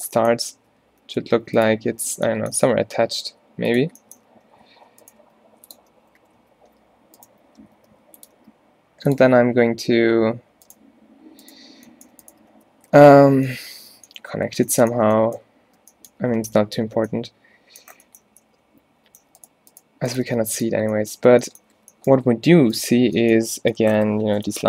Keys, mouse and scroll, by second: 0.1 z, 0.5 z, 1.0 e, 2.1 z, 2.7 g, 4.4-6.4 typing, 7.9 g, 8.4 e, 9.6 a, 9.9 a, 12.6 f, 12.9 a, 13.1 a, 13.5 middle click, 14.0 middle click, 16.9 z, 18.6 z, 20.3-23.0 typing.